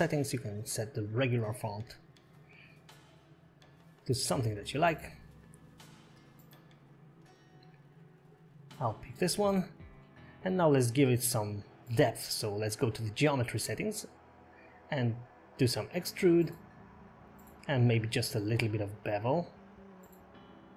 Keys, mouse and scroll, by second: 3.0 click, 7.8 click, 8.4 click, 10.1 scroll down 1, 10.2 middle click, 10.6 shift+middle click, 10.6-11.1 scroll up 11, 11.1 click, 11.4 scroll down 1, 16.2 click, 17.6 click.